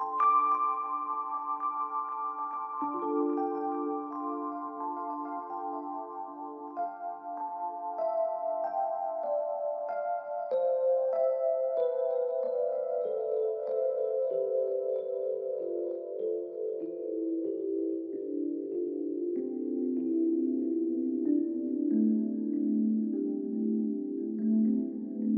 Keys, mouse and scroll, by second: 0.4 double click, 2.1 shift+click, 5.3 ctrl+click, 15.2 ctrl+t, 16.3 shift+click.